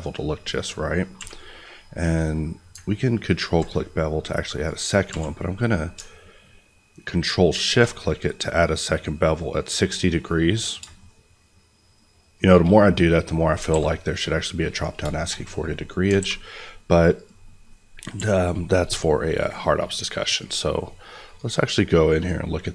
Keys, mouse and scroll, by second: 0.6-1.1 scroll up 1, 1.1 q, 3.4 ctrl+click, 4.5 right click, 5.0 q, 7.6 ctrl+shift+click, 10.7 shift+click, 13.0 middle click, 13.3 scroll down 2, 13.6 alt+a, 13.8 middle click, 14.1-14.7 scroll up 1, 14.7 click, 15.1 shift+middle click, 15.8-16.1 scroll up 2, 16.1 alt+a, 16.3 scroll down 1, 16.5 middle click, 16.8-17.1 scroll up 1, 17.1 click, 17.6 middle click, 18.1 n, 19.3 click, 22.6 middle click.